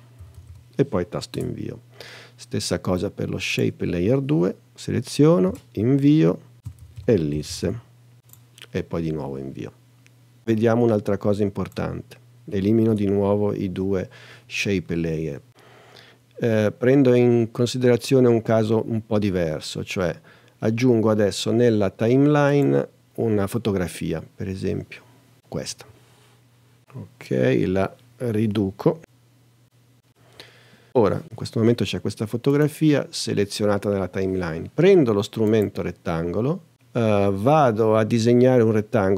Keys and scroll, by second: 0.0-1.0 typing, 1.3 Return, 5.4 Return, 6.3-8.1 typing, 14.2 BackSpace.